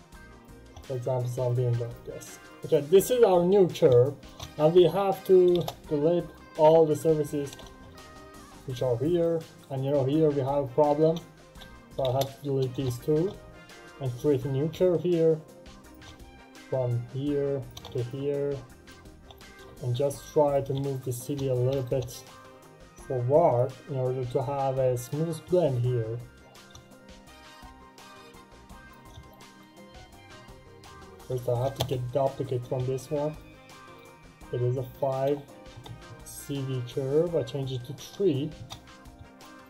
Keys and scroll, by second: 5.3 Delete, 5.4 Return, 11.8 Delete, 12.0 Return, 31.7 space, 35.6 3, 35.8 Return, 38.4 Return.